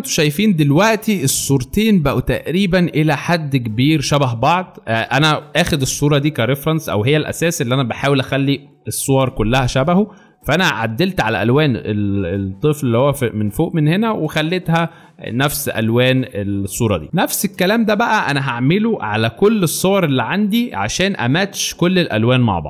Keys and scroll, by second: 0.0 alt+space, 1.3 alt+space, 1.9 alt+space, 12.0 space, 17.0 alt+space.